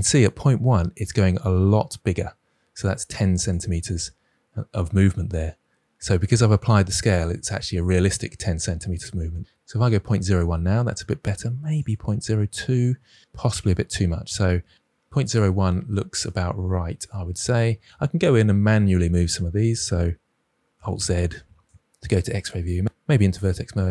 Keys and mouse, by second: 3.4-10.7 drag, 11.7 click, 13.5 click, 15.8 Tab, 17.7 Tab, 20.7 alt+z, 21.2 click, 22.0 1, 22.6 drag, 22.8 ctrl+z, 22.8 g, 23.4 g.